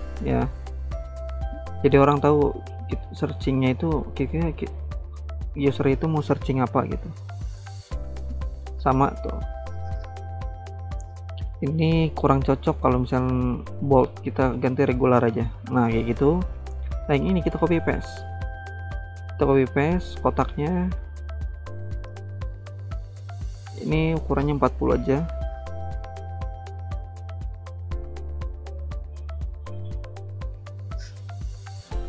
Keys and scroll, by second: 17.4 ctrl+c, 17.6 ctrl+v, 24.1-25.1 typing.